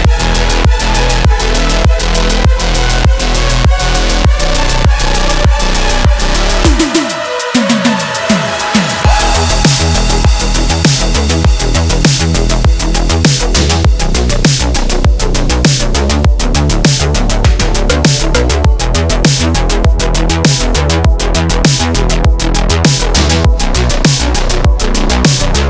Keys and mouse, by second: 3.5-10.4 drag, 11.1-11.9 middle drag, 12.7 drag, 13.9-14.5 shift+middle drag, 15.4 g, 20.2 shift+middle click, 20.7-21.2 middle drag, 21.4 shift+middle click, 22.4 shift+middle click, 23.8-24.6 drag, 25.1 shift+middle drag.